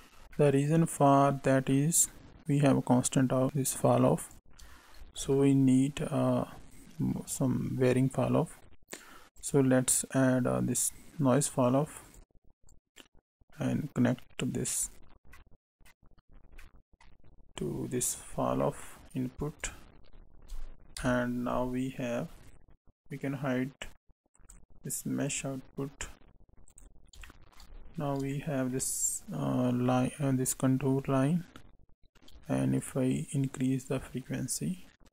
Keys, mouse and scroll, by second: 0.3 middle click, 1.7 middle click, 2.5 click, 5.0 shift+a, 12.6 click, 15.3 middle click, 16.3-16.6 scroll down 2, 16.6 middle click, 18.2 scroll up 3, 18.5 middle click, 19.5 right click, 20.1-20.9 scroll down 1, 20.9-21.3 scroll down 1, 20.9 KP_7, 22.2 scroll down 2, 24.3 click, 25.2 click, 26.6 click, 27.2 shift+middle click, 27.7-28.3 scroll up 2, 28.3 shift+middle click, 29.8 middle click, 31.0-31.3 scroll up 3, 32.7 shift+click.